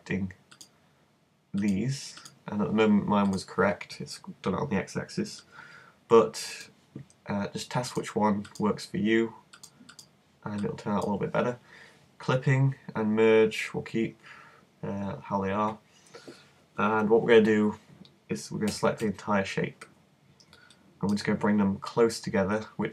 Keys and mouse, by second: 5.4-8.0 middle drag, 8.0-11.8 drag, 11.8 middle click, 18.7 a, 19.0 a, 20.7-22.1 drag.